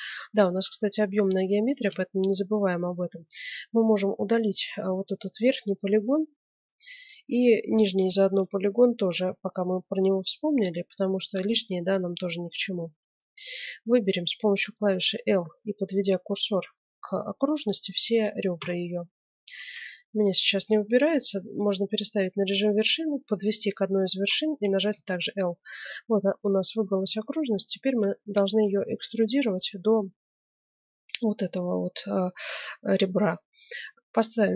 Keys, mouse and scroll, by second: 0.6-2.0 right drag, 1.7 ctrl+Tab, 2.0 click, 2.4-4.0 middle drag, 4.0 click, 4.6-5.8 right drag, 5.1 x, 6.2-7.7 middle drag, 7.7-9.7 right drag, 7.9 x, 9.7-13.6 middle drag, 18.5 l, 19.6 ctrl+Tab, 24.9 l, 26.4-29.9 middle drag.